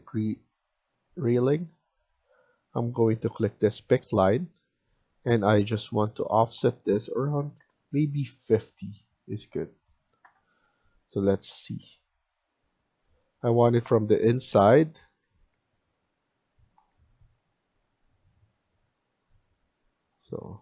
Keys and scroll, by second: 7.1-8.0 typing, 10.1 Return, 13.5 Return, 14.4 Tab, 15.2 Escape, 15.4 Escape, 16.8 Escape.